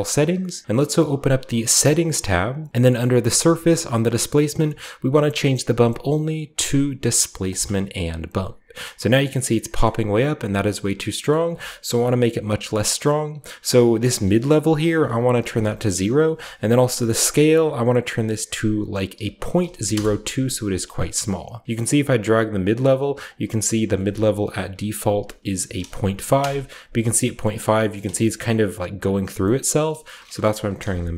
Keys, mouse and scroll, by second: 1.1 click, 1.4-1.9 scroll down 2, 1.6 click, 5.1 click, 7.4 click, 8.4-9.3 scroll down 2, 9.8-11.0 middle drag, 11.1-13.0 scroll up 2, 11.2-13.0 middle drag, 14.1 scroll up 1, 14.4 click, 15.1-16.2 drag, 15.3 Return, 15.3 0, 17.2-18.9 drag, 18.5 ., 19.1 0, 19.5 2, 19.8 Return, 20.5-21.4 scroll up 1, 20.5 typing, 21.4 scroll down 1, 21.7-23.3 shift+middle drag, 24.0-25.6 typing, 24.3 shift+click, 26.3 Return, 27.0 scroll down 2, 27.4-27.7 middle drag, 27.9 shift+middle click, 28.2-29.3 shift+middle drag, 29.5 middle click, 30.2-31.1 drag, 30.3-31.1 typing.